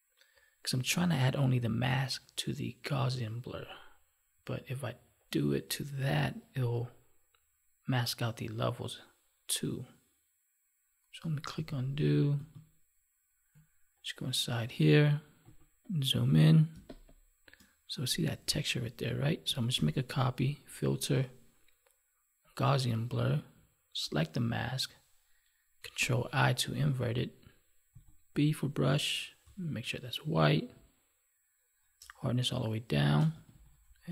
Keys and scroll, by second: 11.5 ctrl+z, 16.7 space, 19.8 ctrl+j, 25.9 ctrl+i.